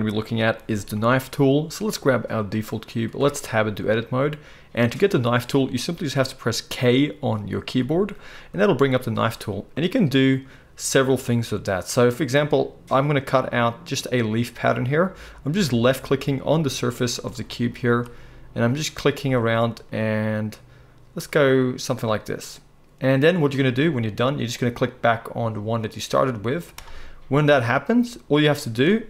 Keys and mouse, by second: 3.2 Tab, 7.7 k.